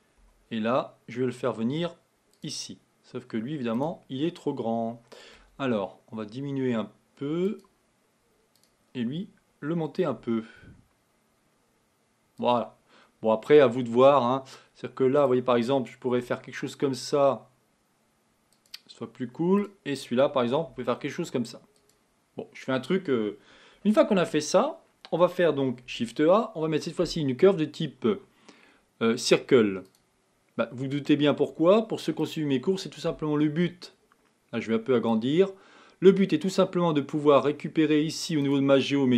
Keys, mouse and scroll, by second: 0.2 g, 3.7 click, 5.4 s, 8.6 click, 10.2 g, 15.2 click, 16.2 g, 19.6 click, 20.7 g, 24.0 Tab, 25.9 shift+a, 30.8-31.2 scroll down 2, 32.2 click, 35.1-37.0 drag, 37.2 click, 38.4-39.1 drag.